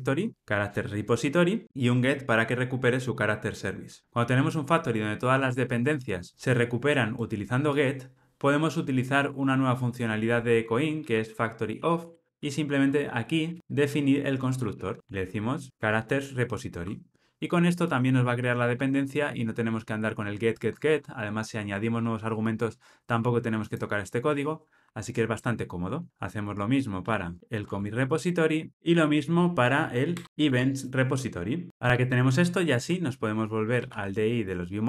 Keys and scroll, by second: 0.3 Return, 1.6 alt+Return, 13.5 alt+Return, 15.7 alt+Return, 27.4 Escape, 27.6 Tab, 30.1 Return, 30.4 Tab.